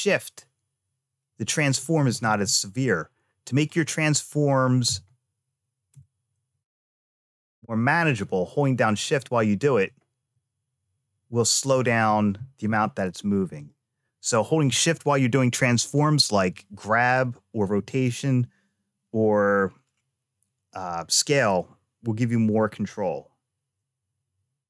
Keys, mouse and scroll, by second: 2.1 ctrl+z, 3.5 click, 4.7 r, 12.5 ctrl+z, 13.4 click.